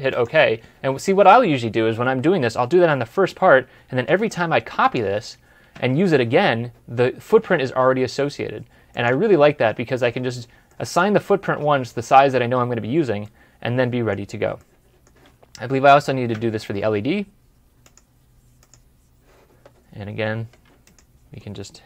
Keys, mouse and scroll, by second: 3.9 typing, 5.6 typing, 9.5 ctrl+z, 10.6 middle click, 13.1 middle click, 19.7 scroll up 1, 20.1 scroll down 1.